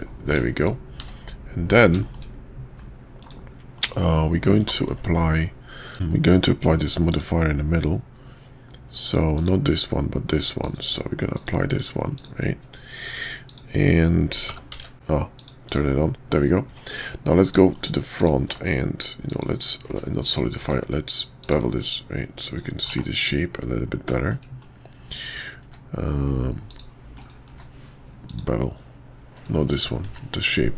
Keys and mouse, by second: 0.4 shift+drag, 2.0 shift+click, 3.2-3.7 drag, 3.7 middle drag, 4.8 ctrl+`, 9.3-12.2 drag, 13.4 click, 14.5 g, 14.9 ctrl+`, 16.3 KP_5, 17.0 KP_5, 17.6 shift+click, 18.2 click, 18.4 q, 20.6 q, 22.9 /, 24.2 shift+drag, 24.6-25.1 drag, 25.6 q, 27.5 q, 29.7 click, 30.0 q.